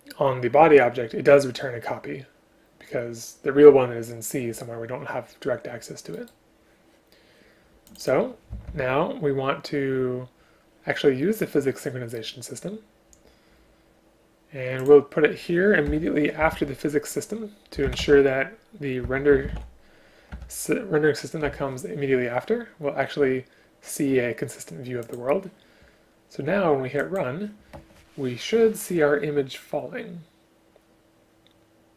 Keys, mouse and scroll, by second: 8.7 ctrl+c, 15.9 Return, 16.6 ctrl+v, 20.4 Return.